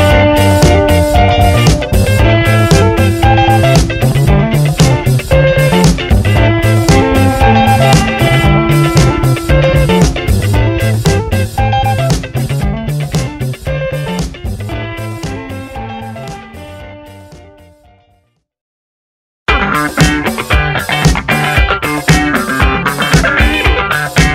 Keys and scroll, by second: 0.0 Return, 0.8 Down, 1.1 Up, 1.6 Down, 2.2 Up, 2.5 Left, 2.8 Down, 3.7 Return, 4.4 t, 5.9 F7, 16.7-18.4 typing, 20.8 space, 23.4 shift+7.